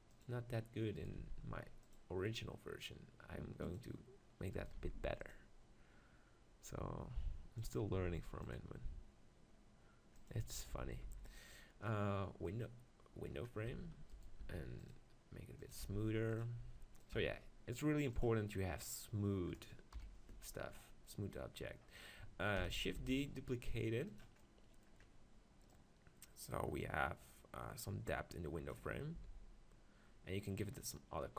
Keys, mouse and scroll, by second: 0.2-2.1 drag, 1.0-3.6 right drag, 1.2 ctrl+r, 3.8-4.8 drag, 4.6 right click, 4.8 ctrl+r, 8.0 ctrl+r, 10.4 Tab, 10.8 z, 11.1 z, 14.1-17.8 drag, 14.4 ctrl+r, 15.7 right click, 15.8 ctrl+r, 20.0 KP_1, 22.6 shift+d, 22.9-24.4 drag, 22.9 s, 24.4 middle click, 25.7-27.6 drag, 29.2 s, 30.6-31.3 drag.